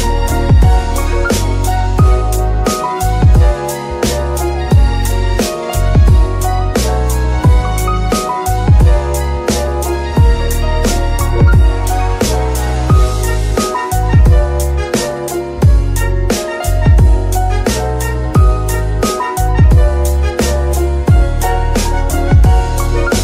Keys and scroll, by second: 3.5 ctrl+Tab, 8.2 r, 8.3 x, 9.9 r, 10.7 r, 14.2 alt+r, 14.8 r, 14.9 r, 16.5 alt+r, 18.1 r, 18.6 Escape, 18.8 g, 19.1 Escape, 20.4 r, 20.9 Escape, 22.8 r, 23.0 x.